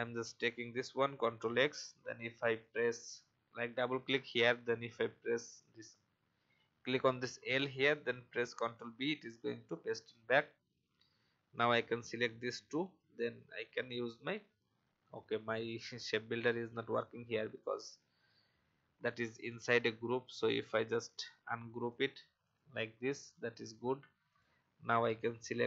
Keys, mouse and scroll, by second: 1.1 ctrl+x, 2.3-3.6 drag, 8.4 ctrl+b, 10.4-10.7 alt+scroll up 1, 11.5 shift+click, 12.6 shift+m, 14.6 alt+scroll down 1, 16.1-16.5 scroll down 1, 16.5 typing, 17.5 click, 17.8 typing, 18.3-18.7 alt+scroll down 1, 19.2 click, 21.1 right click.